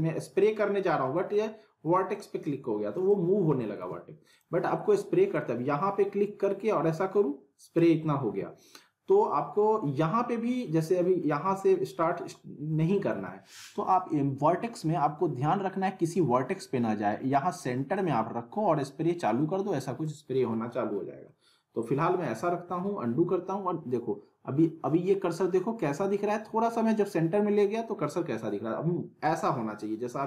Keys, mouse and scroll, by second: 3.8 ctrl+z, 4.3-7.8 drag, 8.2 ctrl+z, 11.8-12.5 click, 13.1 ctrl+z, 14.8 scroll up 1, 17.9-20.1 drag, 20.2 scroll down 1, 21.3-22.5 middle drag, 22.6 z.